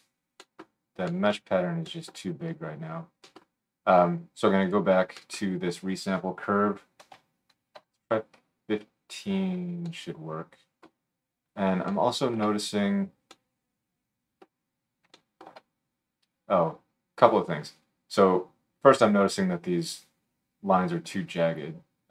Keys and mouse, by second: 0.3 middle click, 0.6 right click, 0.7 middle click, 0.8 right click, 1.4-7.3 middle drag, 1.8-7.3 right drag, 4.6-7.3 drag, 15.0-18.0 shift+drag, 15.0-22.1 shift+middle drag, 15.0-18.0 shift+right drag.